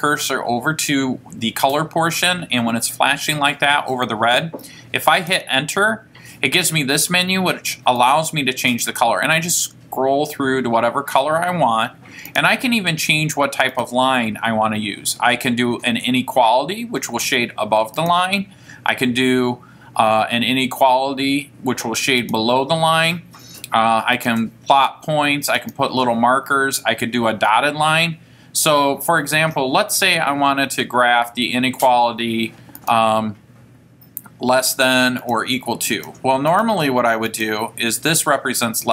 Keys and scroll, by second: 5.3 Return, 8.2 Right, 8.8 Right, 12.0 Right, 12.4 Down, 13.9 Right, 18.1 Right, 22.3 Right, 24.3 Right, 25.8 Right, 32.9 Right, 35.3 Right, 36.1 Right, 37.4 Right.